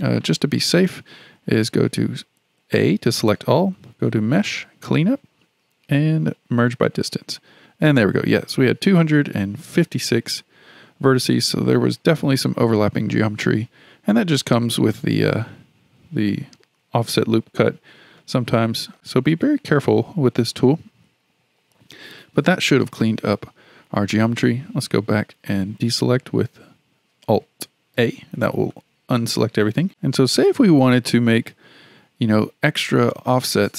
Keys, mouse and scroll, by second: 1.6 a, 4.1-7.1 drag, 14.9-18.0 shift+middle drag, 18.2-21.0 middle drag, 21.0 KP_1, 27.9 alt+a, 28.7-32.7 shift+middle drag.